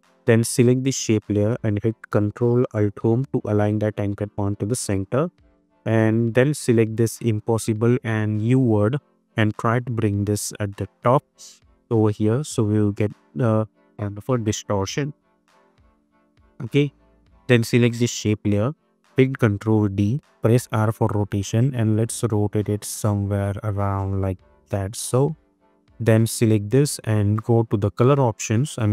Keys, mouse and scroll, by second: 3.6 ctrl+alt+Home, 7.2 click, 8.4 ctrl+click, 9.6-12.1 drag, 15.4 click, 18.5 click, 19.2 ctrl+d, 20.5 r, 21.6-25.3 drag.